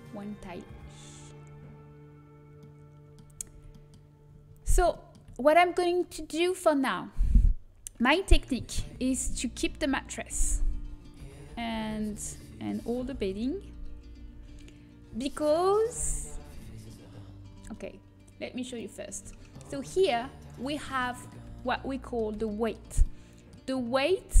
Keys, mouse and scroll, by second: 1.2-6.7 middle drag, 4.4 a, 10.4-14.5 typing, 15.2-18.6 middle drag, 17.4 a, 18.6-20.1 drag, 20.1-24.4 middle drag.